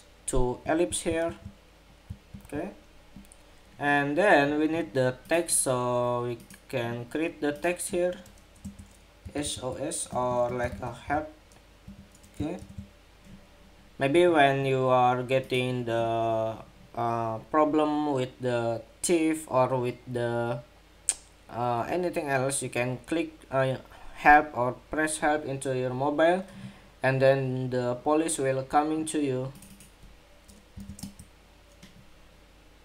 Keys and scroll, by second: 0.4 super+=, 1.0 super+-, 2.0 super+=, 11.6 ⟲, 11.8 ⟲, 12.3 super+-.